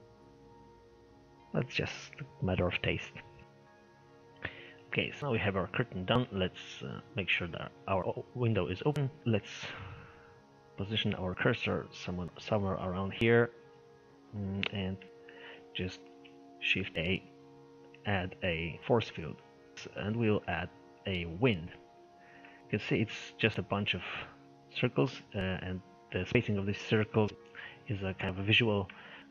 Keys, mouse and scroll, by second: 4.6 middle click, 5.4-6.1 scroll up 4, 5.6 middle click, 6.1-8.3 middle drag, 8.3-8.6 scroll down 2, 8.6-11.2 shift+middle drag, 11.2 click, 11.9-12.9 middle drag, 12.9 click, 14.7 click, 15.1-16.9 middle drag, 16.9 shift+a, 22.1-22.5 scroll down 2, 22.5 shift+middle click, 22.8-23.1 scroll down 3, 23.1-24.9 middle drag, 24.9-27.3 scroll up 3, 25.1 middle click, 27.3-29.3 shift+middle drag.